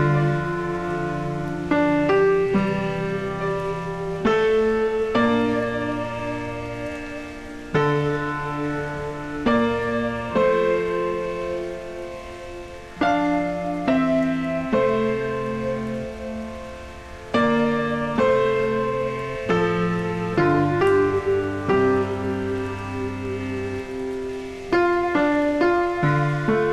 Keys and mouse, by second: 2.8 click, 4.1 click, 7.0 click, 8.3 click, 11.2 s, 11.6 click, 17.9 click, 21.3 s, 21.7 click, 23.1 ctrl+1, 24.5 ctrl+shift+x, 24.9 click, 26.2-26.7 typing.